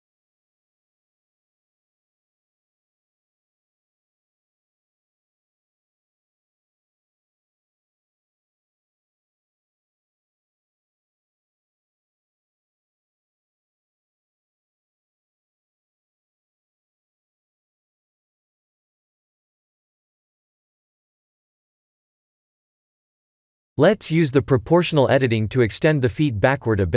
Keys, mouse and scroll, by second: 0.4 KP_Enter, 1.8 shift+click, 2.6 ctrl+j, 3.2 click, 3.9 shift+z, 4.3 scroll up 1, 5.1 scroll down 1, 5.7 scroll down 2, 5.7 KP_1, 6.2 click, 6.7 middle click, 8.3 click, 9.3 middle click, 10.9 right click, 12.7 middle click, 13.7 click, 14.0 middle click, 17.8 Tab, 18.9 click, 19.9-20.2 scroll up 3, 20.3 shift+middle click, 20.9 middle click, 21.9 scroll up 1, 22.4 KP_1, 23.1 ctrl+KP_1, 24.5 3, 25.3 click.